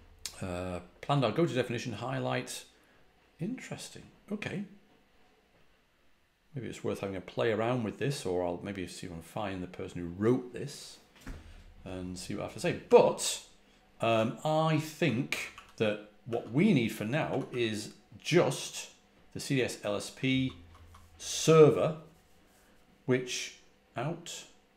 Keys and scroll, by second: 12.7 typing, 14.0-17.9 typing, 20.7-21.3 typing.